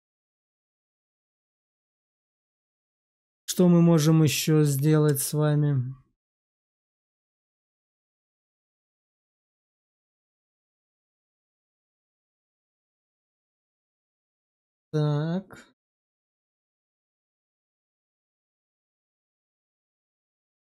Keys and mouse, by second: 13.6-19.4 drag, 20.1 shift+middle click.